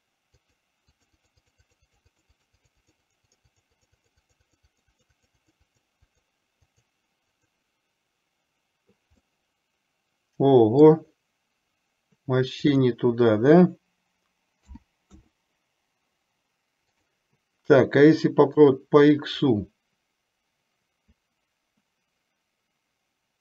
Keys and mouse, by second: 0.5 click, 1.5 click, 1.9 click, 2.3 click, 3.4 click, 3.7 click, 4.0 click, 4.3 click, 5.0 click, 5.8 click, 6.8 click, 9.3-10.9 middle drag, 12.9-15.4 drag, 17.0-18.9 drag, 19.5-23.4 middle drag.